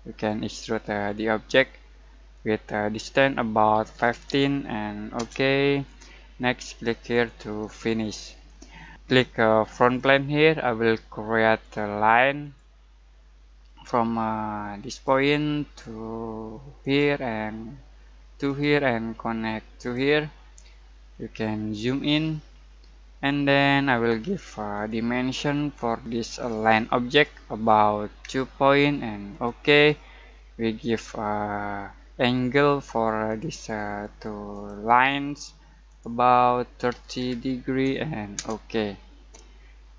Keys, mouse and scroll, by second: 2.3-3.9 drag, 3.9 typing, 5.1 Return, 7.1-9.7 drag, 9.8 click, 14.8 click, 21.1-22.2 scroll down 1, 24.7 click, 31.9 scroll down 1, 33.2 click, 38.3 Return, 39.6 scroll down 1, 39.8-39.9 scroll.